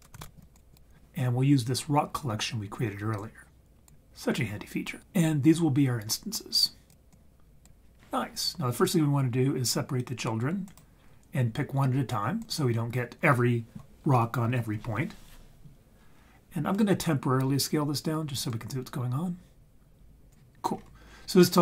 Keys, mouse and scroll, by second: 3.1 click, 7.1 click, 10.7 click, 12.4 click, 18.5-20.3 drag, 20.7-21.6 scroll up 3.